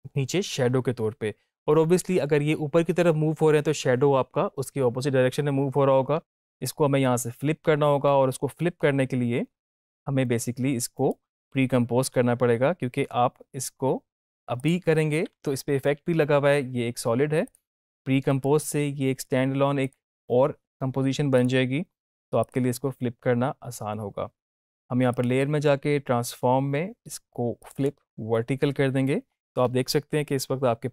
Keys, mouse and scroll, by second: 10.8 right click, 14.5 click, 17.4 click, 18.2 right click, 19.8 click, 25.0 click, 27.5 click.